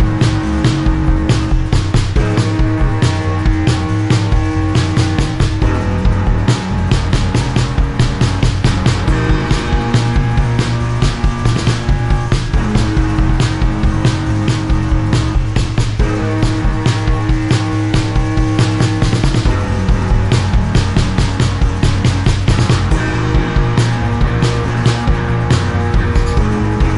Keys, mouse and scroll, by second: 0.3 click, 0.7 click, 1.5 click, 2.4 click, 4.0 click, 4.8 click, 6.1 click, 7.1 click, 7.5 click, 9.6 click, 10.6 click, 11.9 click, 13.4 click, 13.8 click, 14.6 click, 16.0 click, 21.4 click, 24.1 click, 25.7 click, 26.0 click.